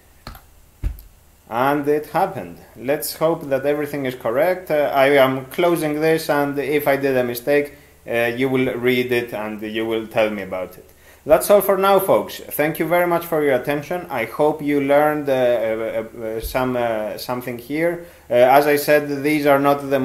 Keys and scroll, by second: 0.3 e.